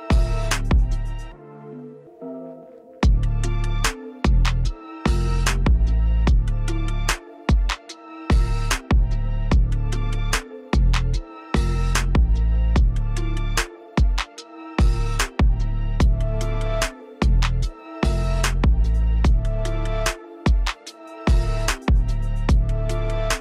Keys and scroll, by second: 0.3 u, 2.2 Delete, 5.0 u, 6.7 Delete, 11.1 space, 15.5 space, 22.0 space.